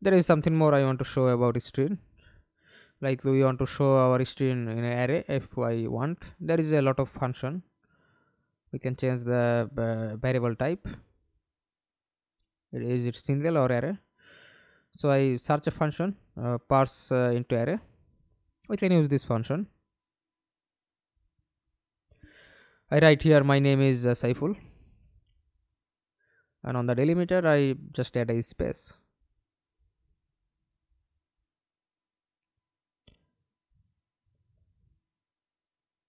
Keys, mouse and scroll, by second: 11.8 right click, 12.2 alt+F9, 12.7 right click, 13.4-17.3 typing, 17.4 Return, 20.4-25.0 typing, 27.0 space, 27.8 Return.